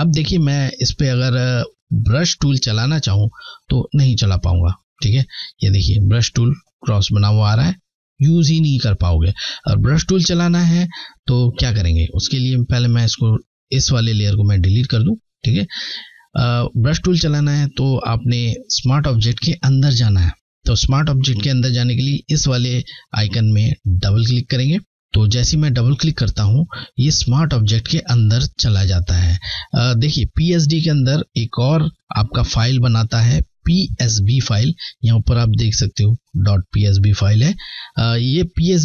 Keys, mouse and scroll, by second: 0.3 alt+scroll up 1, 0.4 typing, 3.7 b, 13.6 Delete, 15.4 alt+scroll down 1, 16.5 click, 24.1 click.